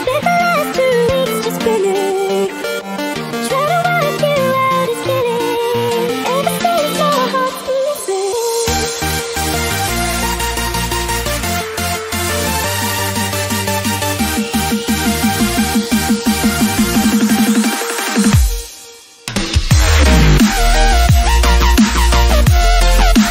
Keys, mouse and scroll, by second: 3.8 scroll up 1, 4.1-5.6 drag, 5.6 ctrl+t, 6.2 click, 6.3-16.5 drag, 17.0 click, 18.4 ctrl+t, 19.5-23.3 drag.